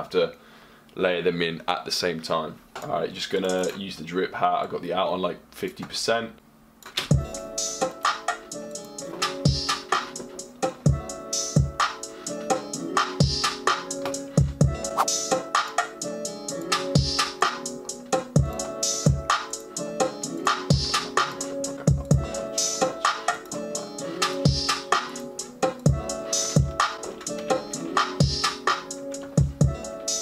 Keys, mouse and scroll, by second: 3.0 click, 21.7 ⁘, 29.3 typing.